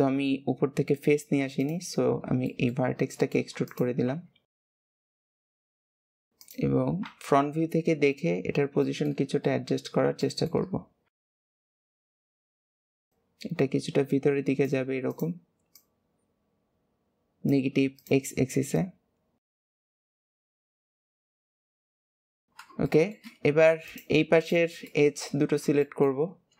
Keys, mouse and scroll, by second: 1.9-2.2 scroll down 4, 2.4-3.6 shift+middle drag, 3.6 click, 5.0 shift+middle click, 5.4 alt+z, 6.0 click, 6.3 click, 7.2 KP_1, 8.1 scroll up 2, 8.8-11.1 shift+middle drag, 11.1 alt+z, 11.4 scroll down 1, 11.6 shift+middle click, 11.8 click, 12.3-15.0 click, 15.0 click, 15.6 click, 17.9 click, 18.7 click, 19.8 shift+click, 20.2 KP_3, 20.9 alt+z, 21.0 middle click, 21.8 KP_1, 22.8-23.8 shift+middle drag, 23.8 click, 24.3 shift+click, 24.8 shift+middle click, 25.2-25.7 scroll up 1, 25.7 shift+middle click, 26.2-26.5 scroll up 1.